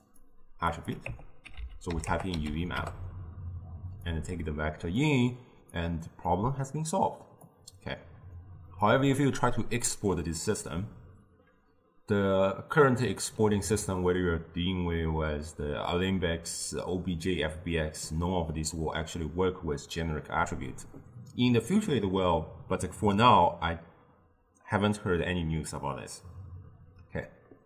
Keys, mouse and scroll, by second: 0.8-3.8 drag, 4.2-5.9 drag, 7.5 click, 13.1-16.3 drag.